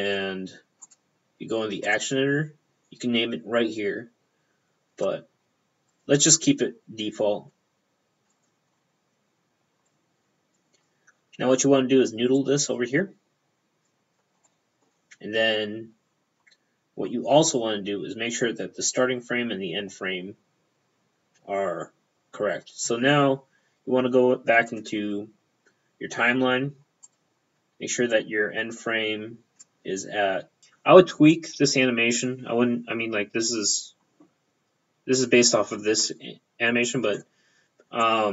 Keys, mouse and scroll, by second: 0.9 click, 1.9 click, 2.0 p, 6.0 click, 6.1 p, 8.4 click, 8.5 p.